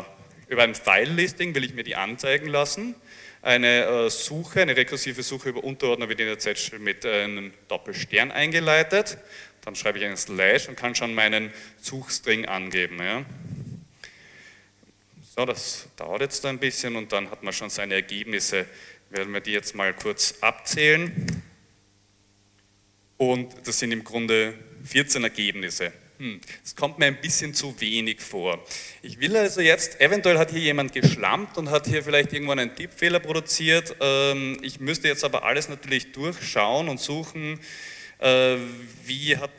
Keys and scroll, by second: 0.4 l, 0.5 l, 1.0 space, 9.3-11.5 typing, 12.8 Return, 18.7 Up, 19.2-21.7 typing.